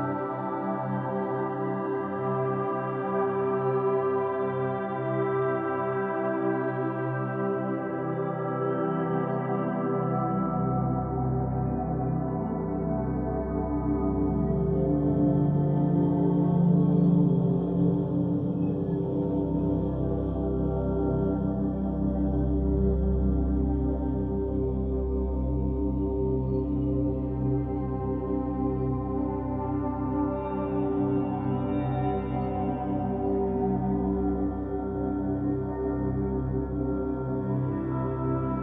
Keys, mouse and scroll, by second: 3.4-9.1 middle drag, 10.8 click, 12.6-13.8 drag, 13.9-17.5 shift+middle drag, 17.5-20.5 drag, 23.7-25.5 middle drag, 25.5-26.7 scroll up 1, 26.7-29.7 middle drag, 29.7 Tab, 31.8 right click, 33.4 scroll down 2, 34.0-35.8 middle drag, 35.8 shift+right click, 37.5-38.6 drag.